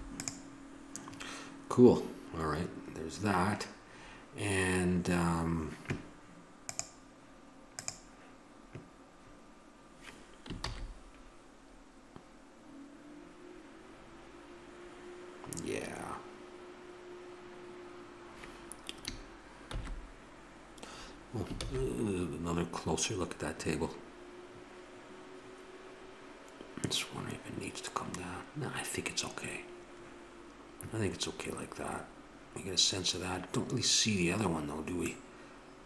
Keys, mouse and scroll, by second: 6.6-9.4 drag, 10.9 shift+z, 18.7-19.7 middle drag, 20.1 shift+z, 21.9 shift+z.